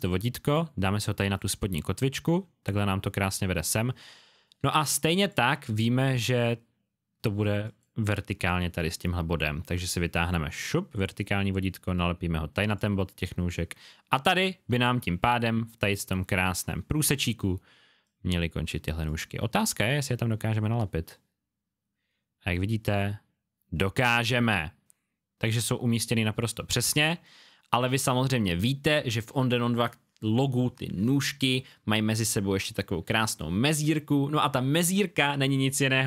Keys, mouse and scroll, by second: 4.7 space, 4.7 click, 7.6 click, 18.0 click, 19.5-19.8 alt+scroll up 1, 21.1 scroll up 1, 24.6 alt+scroll down 1, 25.7 alt+scroll up 1, 26.4-27.0 scroll up 1, 27.0 space, 27.0 click, 35.8-36.0 alt+scroll down 2.